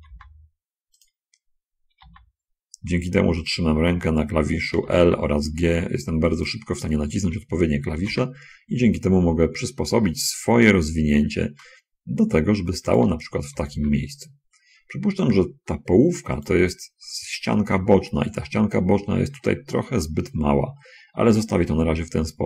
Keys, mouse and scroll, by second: 0.5 g, 2.3 l, 2.4 g, 3.8 click, 5.1 l, 5.4 g, 6.8 click, 8.4 l, 13.3 click, 13.9 l, 14.1 g, 16.4 click.